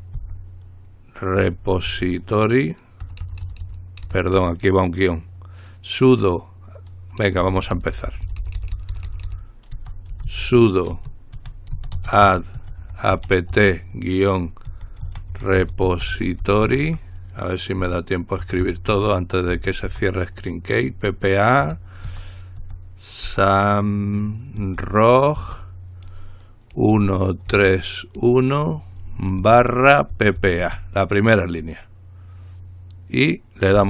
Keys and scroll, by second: 0.4 typing, 1.6-2.1 typing, 3.2-3.8 typing, 9.7-20.1 typing, 22.3-23.5 typing, 24.8-25.6 typing, 26.9-28.4 typing, 29.6-30.8 typing.